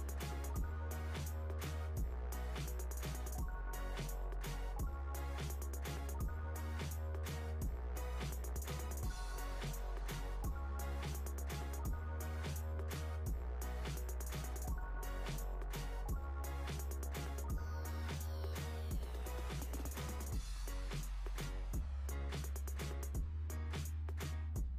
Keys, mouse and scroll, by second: 2.8 drag, 3.8 click, 5.6-6.5 scroll up 4, 6.5 click, 7.6 KP_3, 9.0-9.8 drag, 9.8-11.6 scroll up 7, 11.6 click, 12.9 s, 19.2 Tab, 20.6 click, 21.5-22.7 scroll down 2, 22.7-24.7 drag.